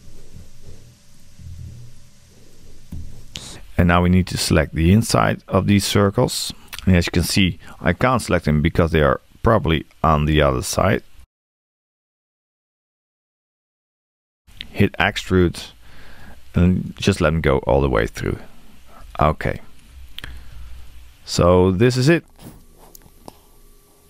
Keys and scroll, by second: 0.3 Return, 2.9 Return.